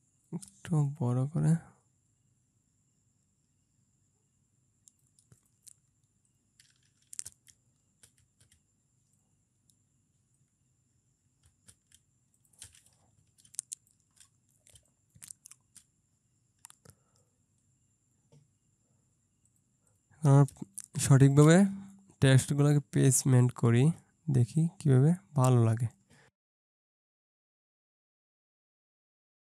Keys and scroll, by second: 7.4 Left, 8.1 Left, 8.5 Left, 13.5 ctrl+space, 14.8 ctrl+space, 20.6 ctrl+space, 27.4 ctrl+space, 29.2 ctrl+space.